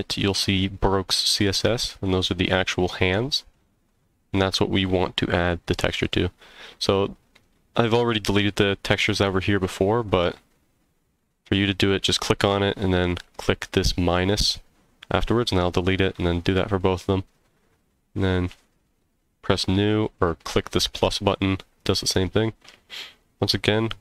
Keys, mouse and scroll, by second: 1.9 click, 4.8 click, 12.0 click, 18.5 click.